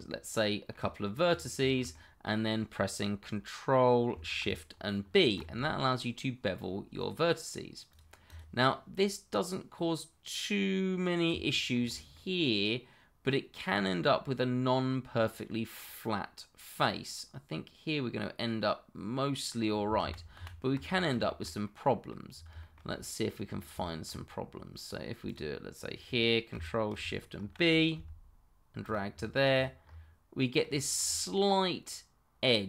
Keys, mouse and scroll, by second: 0.1 middle click, 1.3 click, 1.6 middle click, 5.0 ctrl+shift+b, 7.9 click, 8.3 double click, 8.6 middle click, 11.6 shift+middle click, 11.8 shift+scroll up 1, 12.1 middle click, 15.5 middle click, 20.0 ctrl+z, 20.9 scroll down 1, 21.2 shift+middle click, 21.6 middle click, 22.3 scroll down 1, 22.6 shift+middle click, 22.9 middle click, 23.4-23.8 scroll up 1, 23.8 shift+middle click, 25.2 click, 27.4 ctrl+shift+b, 28.8 click, 29.2 middle click, 29.6 click, 29.8-30.3 scroll up 1, 30.3 middle click, 30.9 shift+middle click, 31.0-31.8 shift+scroll up 1, 31.8 middle click.